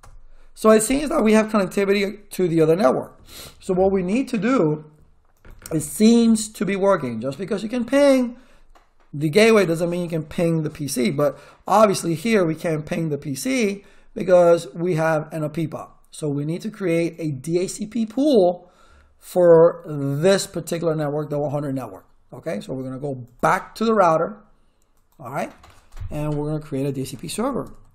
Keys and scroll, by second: 0.0-0.2 typing, 26.7-27.9 typing.